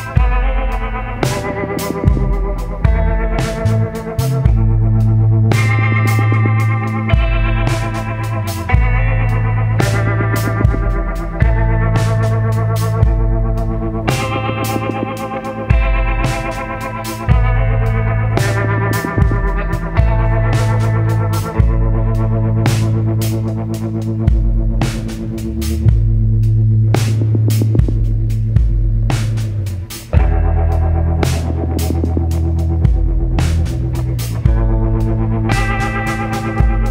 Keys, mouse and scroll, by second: 1.2 click, 3.7 click, 5.7 click, 8.2 shift+click, 11.2 ctrl+d, 13.2-22.5 drag, 22.8-23.2 ctrl+scroll up 1, 24.3 ctrl+click, 28.4 ctrl+scroll up 1, 28.9-29.4 ctrl+scroll down 1, 29.7 ctrl+scroll up 1, 30.7 ctrl+click, 32.1 ctrl+d, 34.5 click.